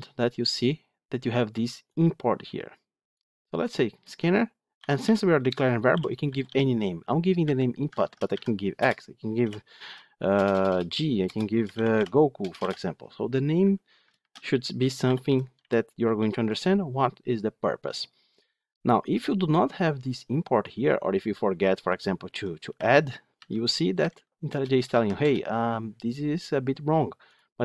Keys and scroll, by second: 7.8 ctrl+shift+Left, 14.1 ctrl+shift+Left, 22.2 Delete.